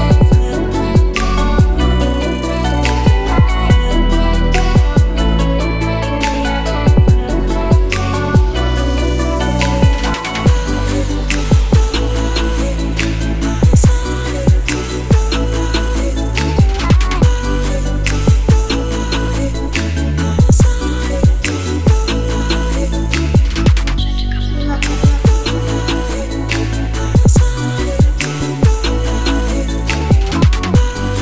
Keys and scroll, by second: 20.8-22.8 typing, 23.3 Return, 26.0 BackSpace.